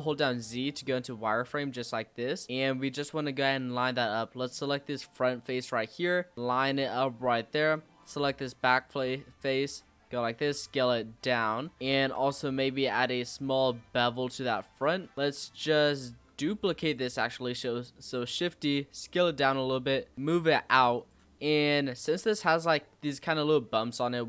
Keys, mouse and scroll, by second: 1.4-1.7 scroll up 1, 1.7 s, 3.5 click, 5.6 click, 7.7 click, 8.7 click, 10.1 s, 11.6 click, 12.1 ctrl+b, 15.1 click, 15.7-16.5 scroll up 1, 16.5 shift+d, 17.6 s, 19.5 e, 22.0-22.6 scroll down 2, 22.6-24.2 middle drag.